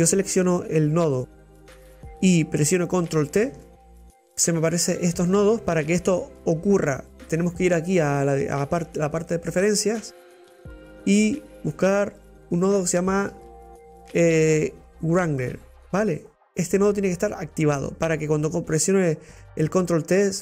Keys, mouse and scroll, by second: 0.3-3.8 drag, 3.6 ctrl+t, 10.6-12.5 drag.